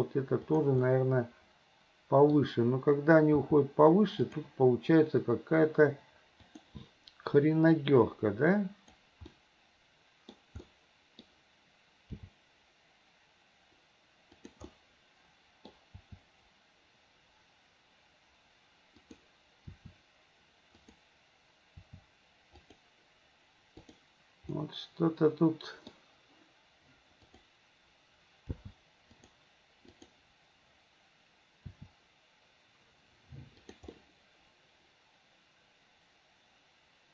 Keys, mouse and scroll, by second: 0.9-2.4 middle drag, 3.5 g, 6.5 click, 7.9-9.0 drag, 9.4-10.4 middle drag, 10.7 middle click, 12.2 g, 14.8 scroll up 1, 14.9 middle click, 15.8 scroll down 1, 16.0 g, 19.8 r, 21.8 r, 24.5-26.0 middle drag, 27.3 click, 28.5 g, 31.7 r, 34.0-37.1 middle drag.